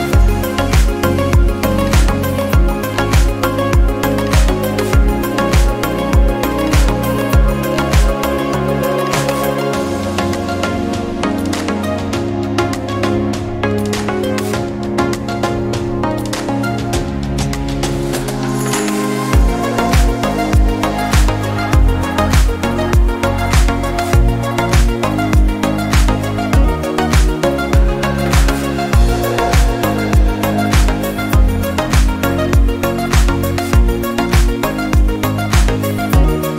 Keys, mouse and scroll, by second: 0.0 3, 0.5 alt+click, 1.7 q, 4.3-6.5 middle drag, 6.5-8.1 scroll up 2, 8.1 Tab, 8.4 click, 8.7-9.2 scroll down 1, 9.2 click, 9.9 KP_1, 10.7 Tab, 11.2 shift+middle click, 11.8-12.8 scroll up 2, 12.8 alt+z, 13.9 1, 14.2 click, 15.4 s, 22.2 ctrl+r, 27.2 ctrl+z, 27.6 ctrl+z, 29.2 ctrl+r, 30.2 click, 31.2 s, 33.2 alt+click, 34.5 ctrl+b.